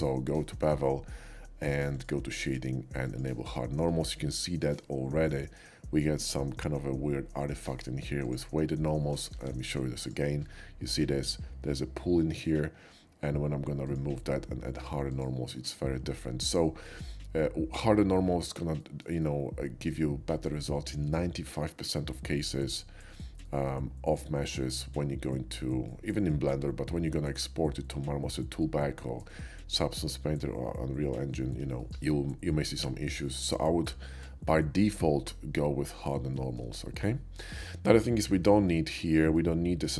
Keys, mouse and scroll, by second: 1.9 click, 3.1 click, 4.5 shift+middle drag, 4.8 shift+middle click, 8.2-9.3 drag, 9.3 q, 9.8 alt+q, 10.0 click, 13.9 click, 15.1 click, 15.8 middle click, 16.2 shift+middle drag, 17.4-18.5 shift+middle drag, 18.8 shift+middle drag, 19.2-20.5 shift+middle drag, 23.5-24.6 middle drag, 25.9-29.2 shift+middle drag, 31.8-32.8 shift+middle drag, 33.0 shift+middle click, 36.3 middle click, 37.3-38.5 middle drag, 37.9 /, 38.7 shift+middle drag, 39.4-39.9 shift+middle drag.